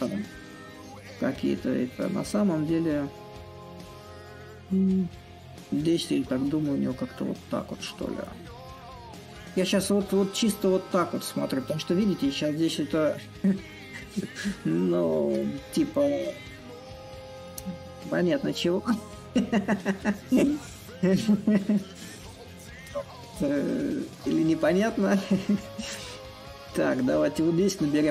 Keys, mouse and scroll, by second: 0.0-5.0 ctrl+drag, 6.2-15.4 ctrl+drag, 16.7-21.7 drag, 23.1-28.1 drag.